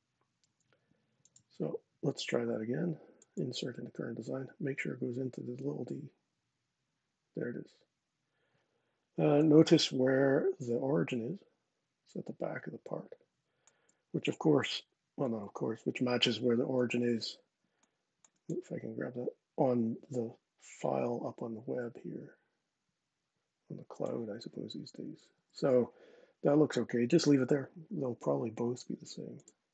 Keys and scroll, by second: 14.3 super+Tab, 15.0 super+Tab, 25.1 super+Tab, 29.3 super+Tab.